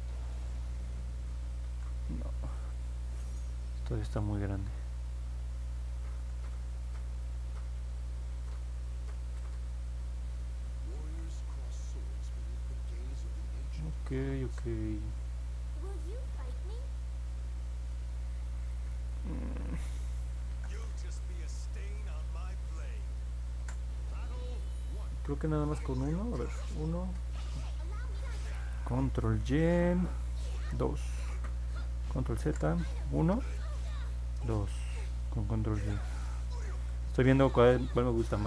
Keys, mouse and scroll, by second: 1.6 ctrl+z, 5.6 click, 6.0 ctrl+z, 6.8 click, 8.2 ctrl+z, 9.5 click, 10.9 ctrl+z, 11.8 click, 17.5 click, 20.4 ctrl+z, 21.8 click, 23.5 ctrl+z, 25.8 ctrl+z, 27.0 ctrl+shift+z, 32.4 ctrl+z, 33.8 ctrl+y, 37.3 ctrl+z.